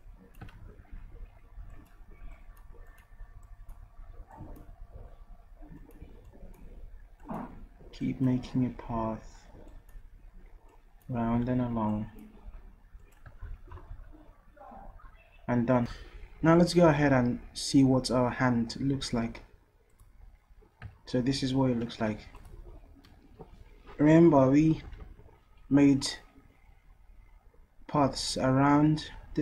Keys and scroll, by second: 0.5 ctrl+z, 0.7 ctrl+z, 11.5 ctrl+z, 25.0 ctrl+z.